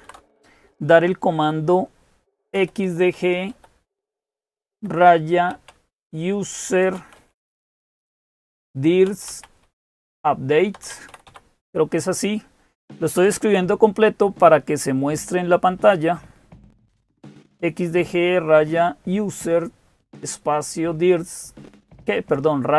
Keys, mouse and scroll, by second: 0.0-22.7 typing.